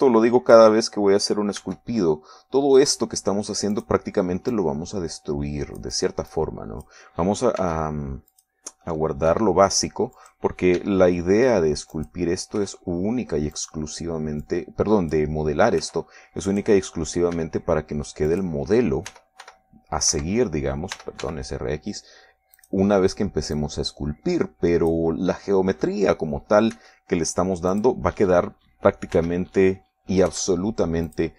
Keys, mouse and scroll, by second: 2.9 e, 5.1 click, 5.9-7.3 drag, 7.6 click, 8.9 s, 9.7 click, 10.6 r, 11.5 click, 12.1 e, 13.3 click, 13.9 r, 14.9 click, 15.7 click, 17.1 s, 17.8 click, 18.7 e, 19.6 click, 20.4 r, 21.4 Escape, 22.3 r, 22.5 x, 23.9 click, 24.9-26.4 drag, 28.1 e, 29.1 click, 30.5 r.